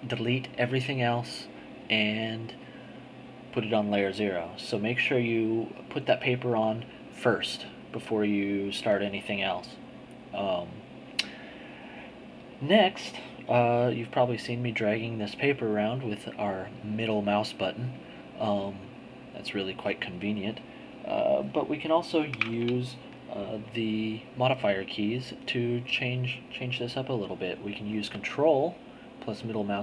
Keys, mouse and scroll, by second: 14.2-15.4 scroll up 2, 15.4-16.0 scroll up 1, 16.0-18.8 drag, 19.4-21.0 drag, 26.0 click, 26.9 middle click, 27.7 click, 29.0-29.8 ctrl+middle drag.